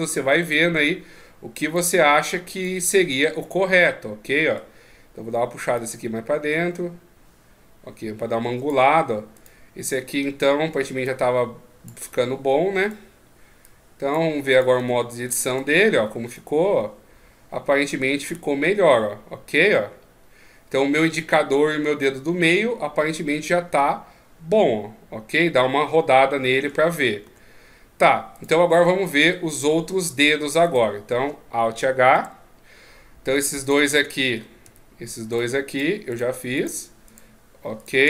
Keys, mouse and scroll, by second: 0.5 right click, 0.8 Tab, 1.7 click, 3.1 middle click, 5.8 click, 9.4 right click, 11.0 click, 12.8 right click, 13.6 click, 14.5 right click, 14.8 Tab, 15.3 right click, 15.6 Tab, 16.3 middle click, 27.2 Tab, 28.4 right click, 28.7 middle click, 29.9 Tab, 30.6 right click, 32.2 alt+h, 33.6 shift+right click, 34.6 a, 35.3 right click, 35.7 shift+right click.